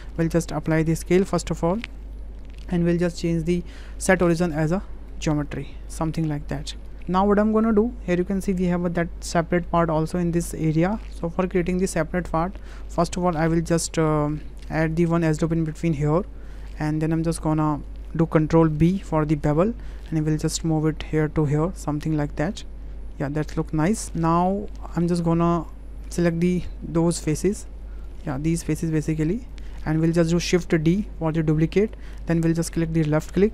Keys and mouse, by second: 0.0-0.4 right drag, 1.0 ctrl+a, 2.1-3.3 middle drag, 5.6-6.7 drag, 11.6-12.3 drag, 12.6 shift+click, 12.9 click, 13.7 Tab, 14.8 click, 15.7 click, 16.9 click, 17.4 click, 19.1 ctrl+b, 24.0 Tab, 24.0 click, 25.1 shift+click, 25.4 Tab, 25.6 click, 27.1 3, 27.6 click, 28.1 shift+click, 29.5 shift+click, 29.9 click, 30.9 shift+d.